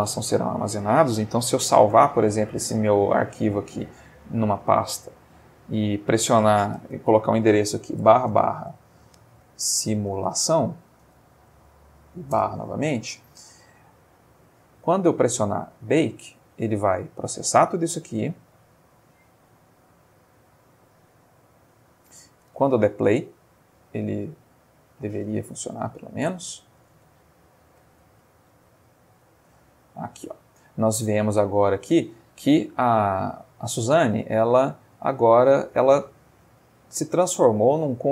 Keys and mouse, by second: 1.9 ctrl+s, 4.3 click, 5.1 click, 5.7 click, 6.7 ctrl+a, 8.0 /, 9.7-11.5 typing, 12.3 Return, 14.9 click, 22.5 space, 23.3 Escape, 24.2-24.7 middle drag, 25.3-25.8 middle drag, 26.1 click, 26.9 space, 27.7 space, 28.1 z, 28.8 click, 29.5 space, 30.1 middle click, 33.5-34.1 middle drag.